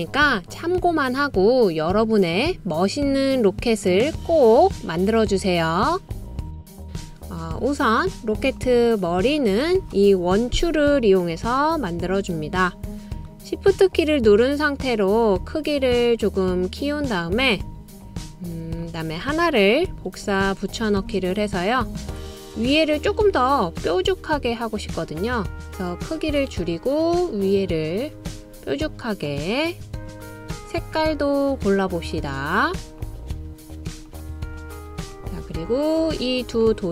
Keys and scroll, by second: 20.0 super+c, 20.4 super+v.